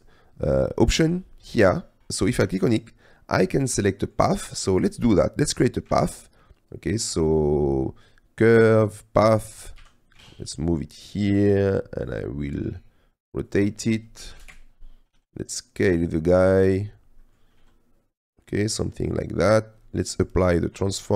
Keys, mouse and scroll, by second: 4.0 shift+middle click, 4.6 click, 6.0 shift+a, 9.8 g, 10.4 shift+z, 13.7 click, 15.2 s, 16.4 click, 17.3 click, 17.7 s, 19.9 click.